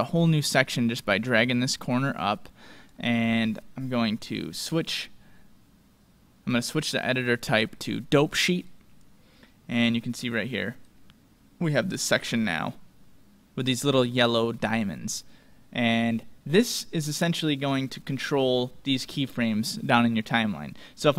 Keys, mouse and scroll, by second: 1.3-3.2 drag, 4.6-6.4 drag, 10.8-12.2 drag.